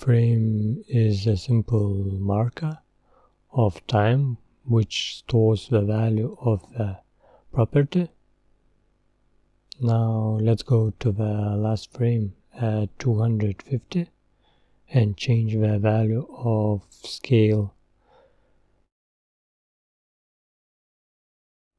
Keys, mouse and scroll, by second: 6.2-6.7 scroll up 3, 8.8-11.6 drag, 14.7 scroll down 3, 15.2-15.5 scroll up 4, 16.8-19.4 drag.